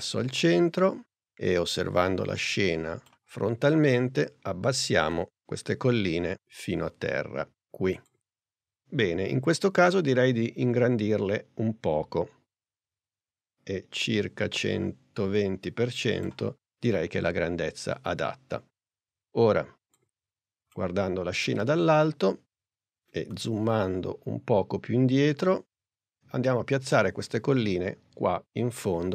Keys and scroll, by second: 4.3 p, 10.6 s.